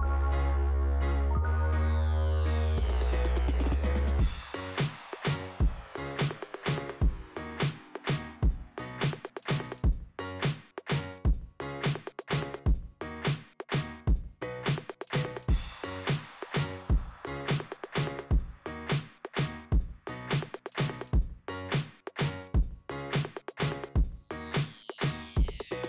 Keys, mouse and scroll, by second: 25.6 scroll up 2.